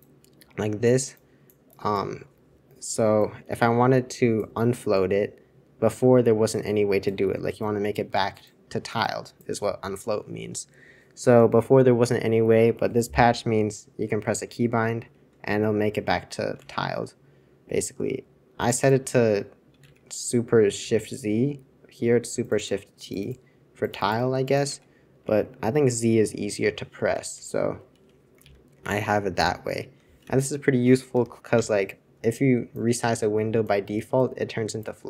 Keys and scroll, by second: 14.6 super+z, 16.5 super+2, 19.9 super+1, 20.8 super+2, 24.8 super+1, 27.3 super+Return, 28.4 super+j, 28.8 super+j, 29.3 super+j, 30.2 super+c, 31.1 super+Return, 31.5 super+Return.